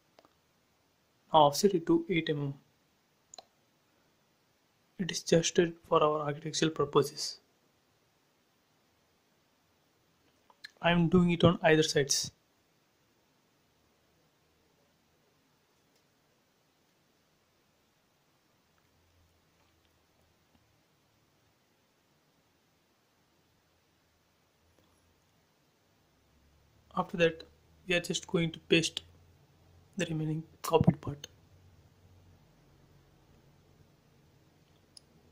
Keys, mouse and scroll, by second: 0.0 f, 0.5 click, 1.6-2.9 typing, 2.6 Return, 4.1 click, 4.5 scroll up 1, 5.6 f, 6.2 click, 8.6 click, 8.8 space, 9.2-11.4 middle drag, 11.4 f, 12.3 space, 12.5 click, 13.4 f, 13.9 click, 15.0-15.5 typing, 15.9 Return, 16.5 scroll up 1, 17.3 space, 17.5 click, 18.6 f, 19.1 click, 21.7 space, 22.1 middle click, 23.3 scroll down 1, 24.7 click, 24.8 click, 25.4 scroll up 1, 26.3-28.4 middle drag, 28.4 scroll up 1, 29.9 click, 31.2 right click, 31.2 right click, 31.9 click, 32.3 shift+middle click, 33.3 click.